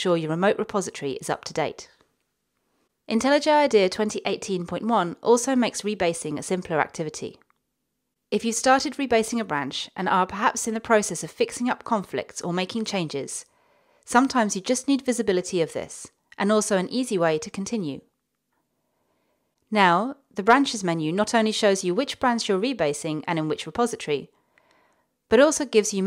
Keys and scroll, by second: 9.9-10.6 typing.